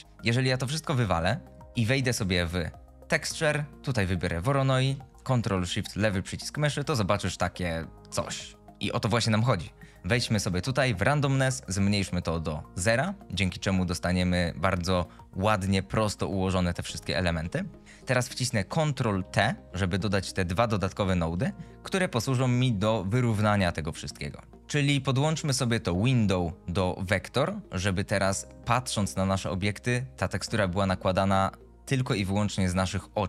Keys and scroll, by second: 2.4 shift+a, 19.5 ctrl+t, 24.5 ctrl+z.